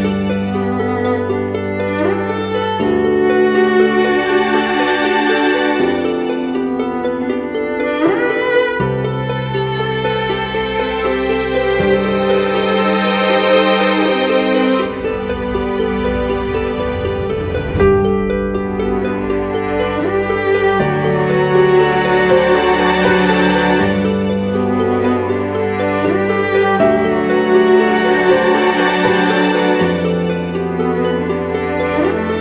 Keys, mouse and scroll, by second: 21.3 [, 21.4 [, 21.6 [, 21.7 [, 24.7 ctrl+t, 28.1 Up, 28.3-29.3 Up, 29.5 Up, 29.9 Return, 32.1 double click.